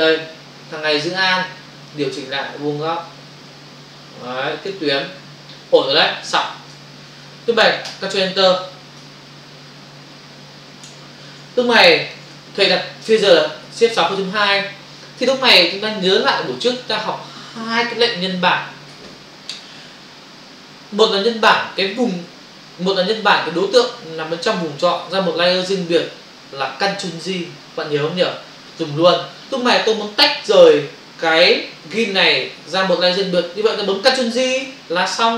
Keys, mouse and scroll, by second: 1.9 alt+click, 6.7 ctrl+o, 7.8 ctrl+Return, 9.0 f, 11.4 space, 11.7 ctrl+click, 13.5 shift+F6, 14.3 Return, 30.8 ctrl+o.